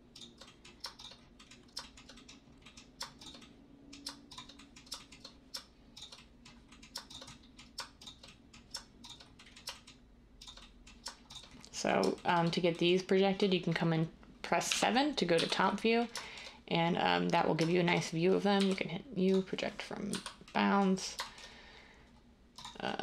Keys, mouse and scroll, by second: 14.7-15.3 typing, 18.5 u, 20.1 z.